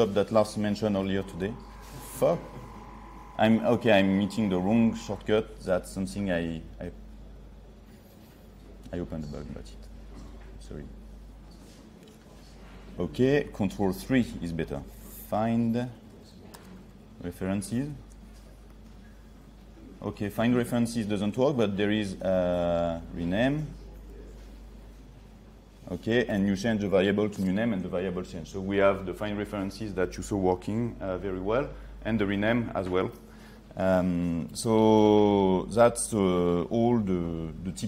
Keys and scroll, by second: 1.2 ctrl+1, 14.1 ctrl+3, 22.7 ctrl+3.